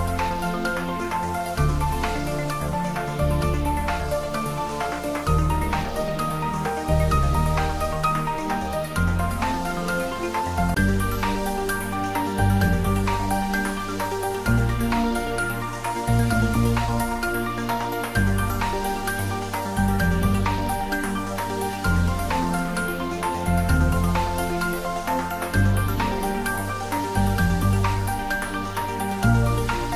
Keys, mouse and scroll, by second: 9.2 click, 16.4 click, 18.4-19.1 scroll down 1, 20.0 middle click, 21.4 scroll up 1, 27.9 shift+a.